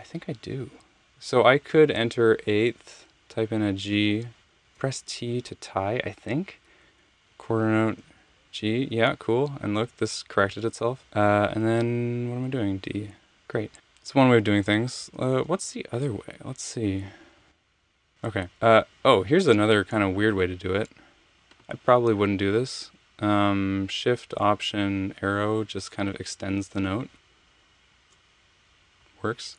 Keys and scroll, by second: 3.2 g, 4.7 t, 7.2 6, 8.0 g, 12.9 d, 15.0 super+z, 15.1 super+z, 16.3 super+z, 19.4 Home, 25.7 alt+shift+Right.